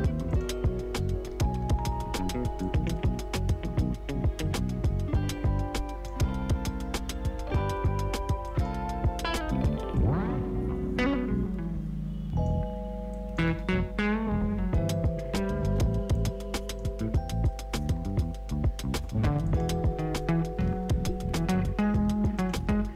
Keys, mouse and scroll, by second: 16.4-17.8 drag, 17.8 space, 19.4 click, 20.1 u, 22.3 click.